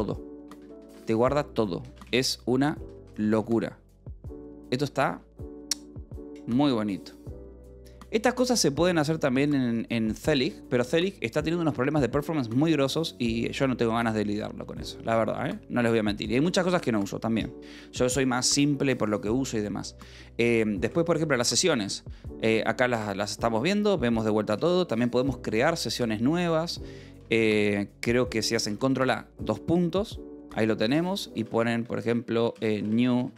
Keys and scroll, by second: 0.3-3.4 typing, 20.8 s, 22.5 k, 23.1 j, 25.4 Escape, 27.7 :, 28.0 Escape, 29.9-33.3 typing.